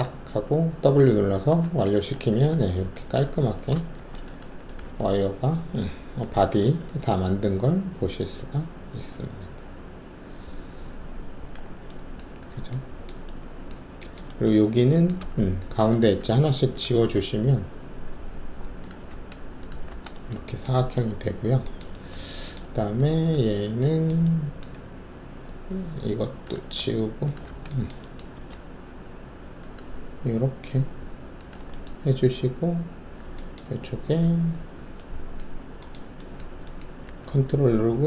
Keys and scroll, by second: 1.6 alt+`, 3.9 alt+shift+w, 15.1 alt+2, 16.2 alt+q, 17.1 alt+q, 19.1 alt+q, 19.8 alt+q, 26.7 alt+q, 27.4 alt+q, 28.7 alt+s.